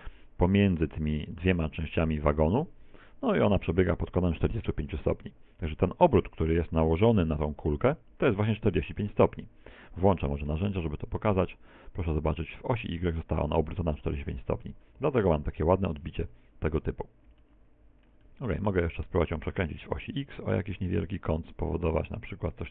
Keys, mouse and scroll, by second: 6.8-7.2 scroll up 2, 8.5-9.2 scroll up 5, 8.5 t, 10.5 n, 14.6-15.6 scroll down 8, 15.6 KP_1, 17.6 middle click, 18.2 middle click, 18.7 middle click, 20.2 r.